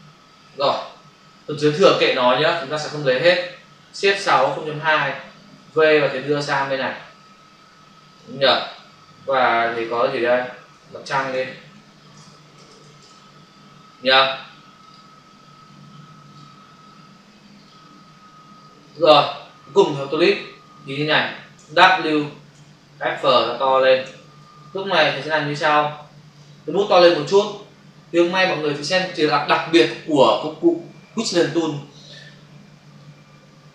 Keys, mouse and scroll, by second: 0.9 Return, 1.9 ctrl+0, 2.6 ctrl+Return, 4.2 shift+F6, 4.7 Return, 5.6 v, 6.0 click, 9.6 click, 9.9 double click, 10.8-12.8 typing, 13.0 Return, 14.7 click, 16.2 click, 18.8 click, 23.7 space, 24.6 ctrl+click, 25.4 click, 27.0 ], 29.1 typing, 32.8 space.